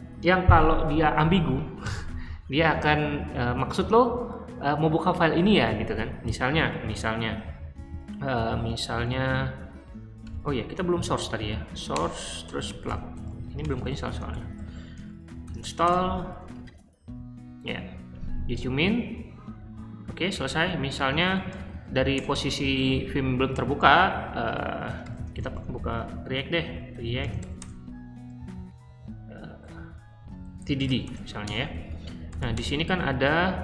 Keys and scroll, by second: 6.3 q, 8.4 shift+;, 9.1 w, 10.2-15.9 typing, 20.4-22.1 typing, 24.6-27.7 typing, 29.9-32.8 typing.